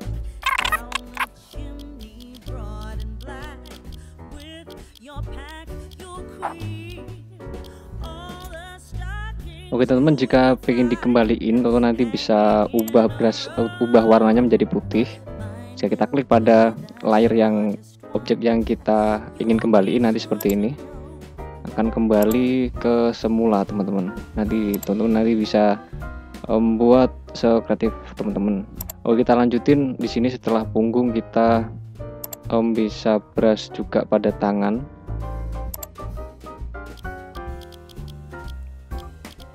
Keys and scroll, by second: 0.5 [, 1.2 ], 1.5 [, 3.9 ], 21.4 ctrl+z, 23.5 ], 26.9 [, 32.8 ], 36.1-38.8 typing.